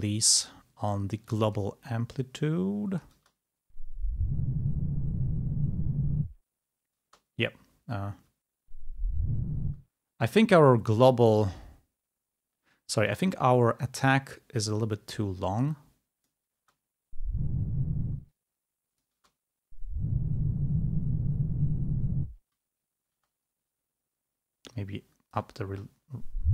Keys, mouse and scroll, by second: 1.3 click, 2.5 click, 3.2 space, 7.2 space, 8.3 space, 9.8 space, 13.1 click, 14.7 click, 15.7 click, 16.7 space, 18.1 space, 18.3 click, 19.2 space, 23.3 space, 24.8 click, 25.8 space.